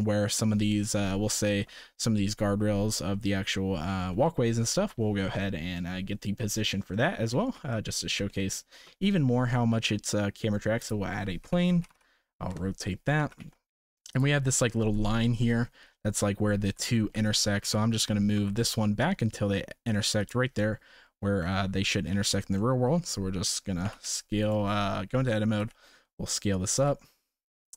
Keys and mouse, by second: 1.3-1.6 shift+middle drag, 4.3 shift+middle drag, 5.7-6.3 middle drag, 6.9 shift+middle drag, 7.4 ctrl+s, 7.7 middle drag, 8.3 shift+middle drag, 8.7 shift+a, 11.4 r, 13.2 g, 15.0 shift+middle click, 16.8 shift+middle drag, 17.6 g, 22.6 shift+middle click, 23.8 g, 24.6 Tab, 25.1 a, 25.4 g, 26.8 s.